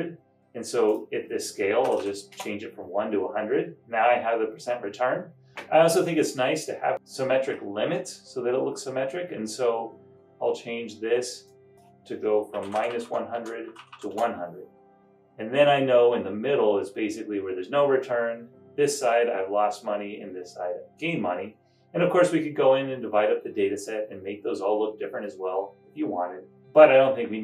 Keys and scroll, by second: 1.7-2.5 typing, 5.4 typing, 12.5-14.4 typing.